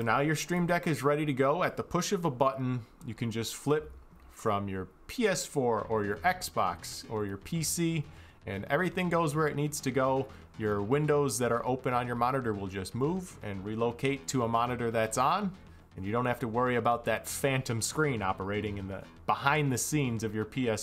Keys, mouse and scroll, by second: 0.2 click.